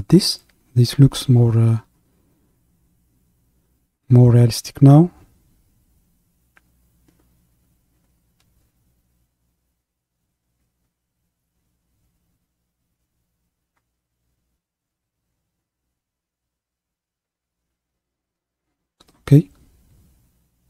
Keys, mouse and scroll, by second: 2.5-15.1 drag, 15.1 KP_3.